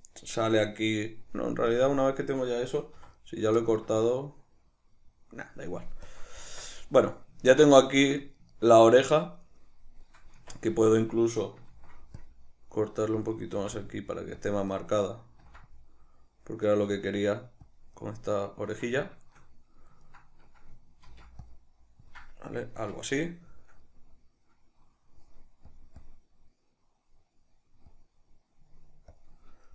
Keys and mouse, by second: 1.9 click, 3.1 3, 3.3 right click, 3.7-6.2 middle drag, 6.2 click, 6.6 Tab, 6.9-13.4 middle drag, 10.5 Tab, 11.8 ctrl+r, 13.4 click, 13.7 ctrl+r, 14.6 click, 14.9-17.9 middle drag, 15.6 ctrl+r, 17.9 click, 18.1-22.3 middle drag, 21.2 ctrl+r, 22.3 click, 22.5-25.8 middle drag, 22.9 Tab, 25.8-28.4 drag, 29.3-29.7 drag.